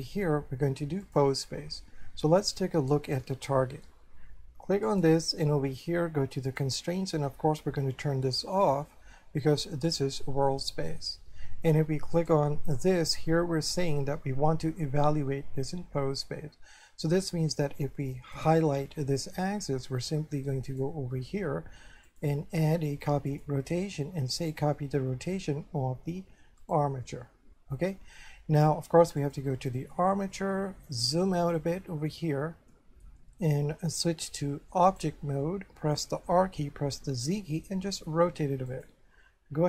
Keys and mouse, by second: 0.1 click, 3.3 shift+middle click, 4.9 right click, 6.5 click, 8.5 click, 10.6 shift+middle click, 12.2 right click, 13.8 click, 18.4 right click, 20.7 click, 22.1 click, 23.3 click, 24.5 click, 26.6 click, 29.2 click, 30.3 shift+middle click, 31.7 middle click, 32.7 shift+middle click, 34.3 click, 36.4 r, 37.2 z, 38.7 click.